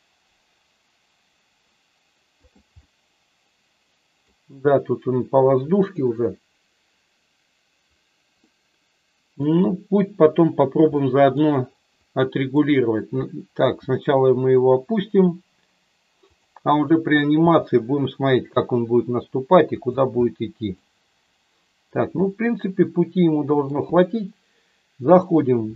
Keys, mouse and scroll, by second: 2.3 click, 2.8-4.3 middle drag, 8.4 middle click, 10.9 middle click, 12.1 click, 13.7 g, 16.2 click, 16.8 click, 17.3 g, 19.7 click, 20.3 middle click, 22.2-23.7 middle drag, 25.1 click.